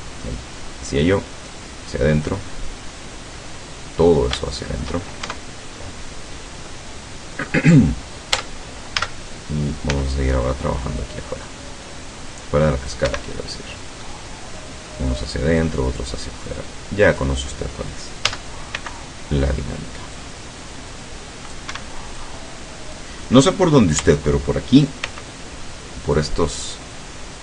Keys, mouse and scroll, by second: 1.1-2.5 drag, 2.5 scroll down 1, 2.9 middle click, 4.0-4.3 scroll up 1, 4.5 shift+middle click, 5.3 shift+Tab, 5.8 shift+scroll up 1, 6.2 scroll down 2, 6.7-7.7 middle drag, 8.4 Tab, 10.0 c, 11.1-13.1 drag, 13.1 Escape, 13.3 middle click, 14.6 middle click, 15.6-17.4 drag, 18.3 a, 18.8 c, 20.2-21.8 drag, 21.8 Escape, 22.2 click, 24.0 a, 25.1 c, 26.1-27.4 drag.